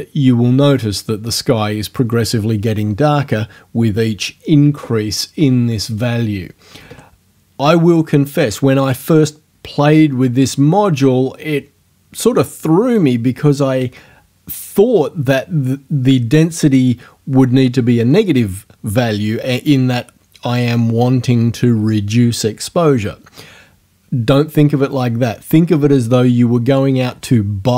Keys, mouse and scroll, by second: 5.9 right click, 6.8 KP_3, 6.9 KP_Enter.